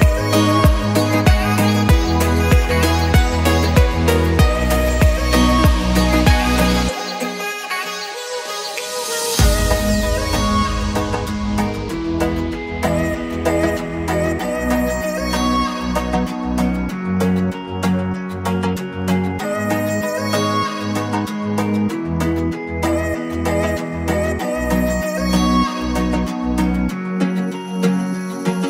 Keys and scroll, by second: 11.8 Escape.